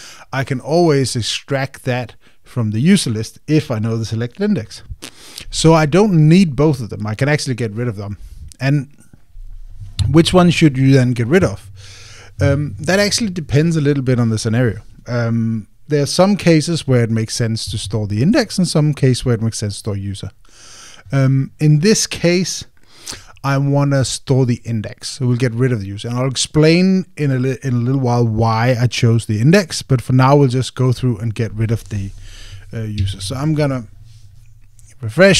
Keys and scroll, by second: 33.8 super+r.